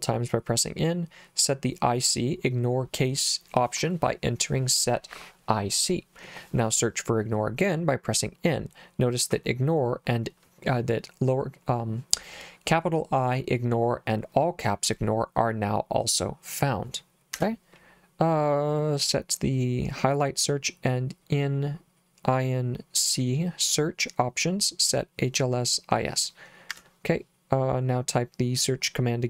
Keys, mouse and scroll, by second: 17.4 Escape, 26.7 Escape.